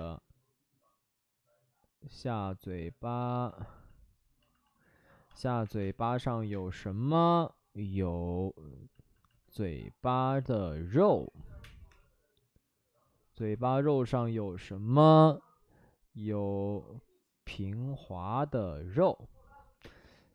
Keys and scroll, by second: 0.5 space, 5.6 1, 5.7 space, 6.5 space, 6.8 ctrl+z, 11.6 space, 11.8 3, 13.9 b, 19.7 b, 19.7 5, 19.7 space.